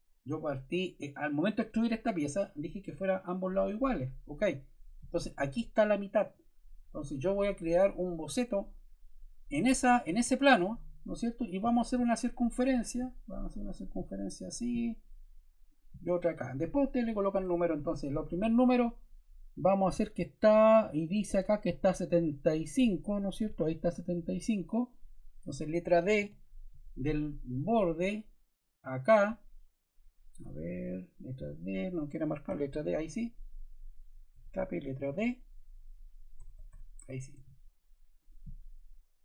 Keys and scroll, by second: 17.3 Escape, 26.1 d, 32.5 d, 34.3 Escape, 35.0 d, 36.3 Escape, 37.3 d.